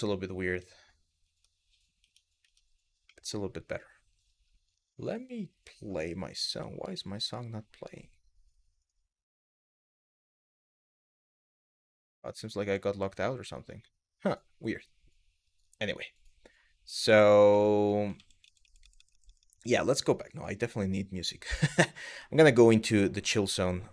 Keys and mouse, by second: 0.1 Tab, 0.9 Tab, 2.8 middle click, 17.2-17.5 middle drag, 17.8 ctrl+z, 18.1-19.5 ctrl+z.